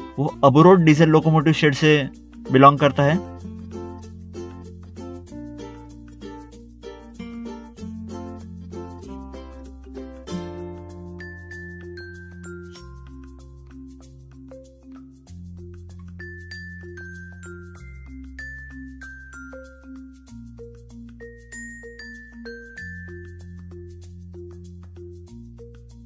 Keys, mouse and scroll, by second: 0.6 click, 2.2 click, 2.8 click, 3.4 click, 3.8 click, 6.6 ctrl+8, 6.8 scroll down 1, 7.3 middle click, 7.3 scroll down 1, 7.4 middle click, 7.6 ctrl+8, 7.8 scroll down 1, 8.0 middle click, 8.1 middle click, 8.7 click, 9.4 middle click, 9.6 middle click, 9.7 scroll up 1, 10.1 scroll down 1, 10.3 middle click, 10.4 middle click, 11.2 click, 12.5 click, 12.9 click, 14.2 scroll down 1, 15.6 scroll up 1, 16.1 middle click, 16.3 middle click, 16.5 scroll down 1, 17.1 scroll down 1, 17.2 middle click, 17.7 click, 19.1 double click, 19.7 ctrl+8, 20.0 ctrl+8, 20.0 click, 20.2 scroll down 1, 20.5 click, 20.7 double click, 20.8 click, 21.5 click, 22.2 middle click, 22.2 middle click, 22.4 click, 22.5 double click, 23.5 click, 23.9 middle click, 24.0 scroll up 1, 24.2 middle click, 24.8 middle click, 25.0 scroll down 1.